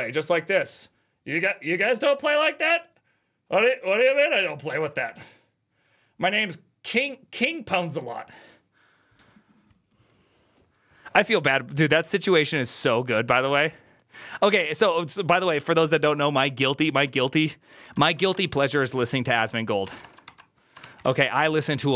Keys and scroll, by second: 17.0 alt+{, 17.8-21.9 typing, 19.2 ctrl+c, 20.7 ctrl+c, 20.9 ctrl+:, 21.1 Return.